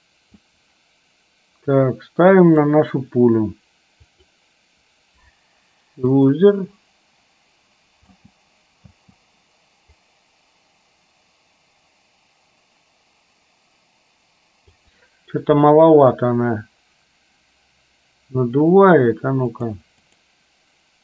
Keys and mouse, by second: 2.7 click, 6.3 click, 8.2 space, 10.3-15.1 drag, 19.7 click, 20.2 click.